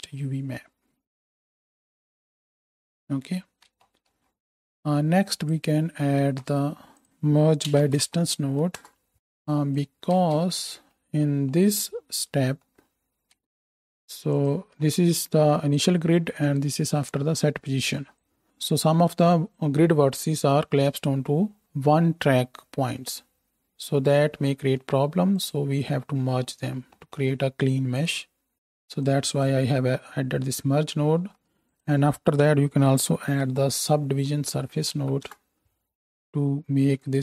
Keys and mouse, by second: 3.5 space, 6.1 shift+a, 9.1 click, 9.9-12.5 ctrl+middle drag, 10.1 ctrl+space, 11.7-12.5 drag, 11.7-12.5 right drag, 12.6-13.1 drag, 12.6-13.1 middle drag, 12.6-13.1 right drag, 13.2-13.7 ctrl+drag, 13.2-13.7 ctrl+middle drag, 13.2-14.3 ctrl+right drag, 13.4 ctrl+space, 14.3 ctrl+shift+middle click, 14.6-16.7 ctrl+shift+right drag, 16.7 ctrl+shift+middle click, 17.0-18.2 ctrl+right drag, 18.2-25.8 middle drag, 25.8-27.9 drag, 25.8 x, 31.5 shift+a, 37.1-37.2 drag.